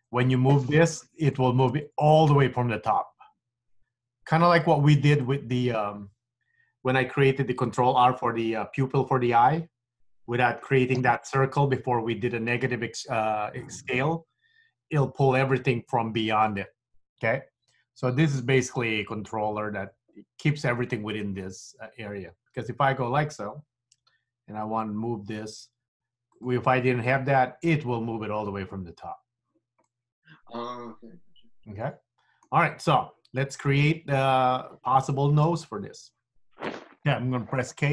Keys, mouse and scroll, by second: 0.4 middle click, 1.4 shift+middle click, 4.7 middle click, 5.4 shift+middle click, 20.5 scroll up 1, 20.7-22.7 scroll down 1, 22.7 KP_3, 24.1 g, 30.0 middle click, 33.5 middle click, 34.3 scroll up 1, 34.5-35.1 scroll down 2, 35.2 shift+middle click, 37.7 k.